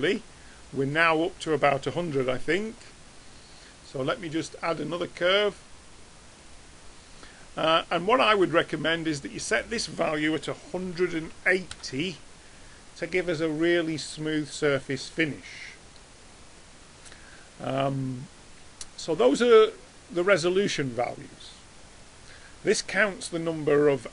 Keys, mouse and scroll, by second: 0.0 Tab, 1.4-3.3 drag, 2.2 x, 3.8-5.6 drag.